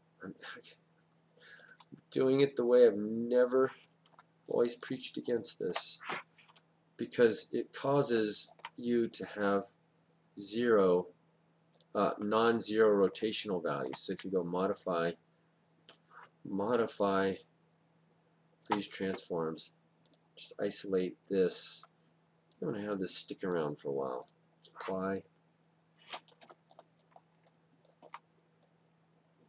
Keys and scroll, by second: 1.7 Down, 14.2 space, 15.1 space, 18.7 space.